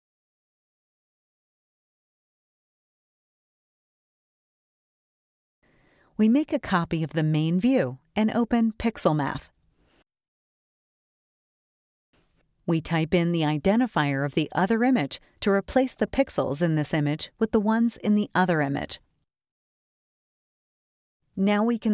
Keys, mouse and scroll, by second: 0.7 click, 1.9 click, 5.1-6.8 drag, 7.5 click, 8.5 click, 10.8 space, 11.1-12.7 drag, 12.6-16.0 typing, 17.7-18.8 drag, 19.9 click, 21.2 click.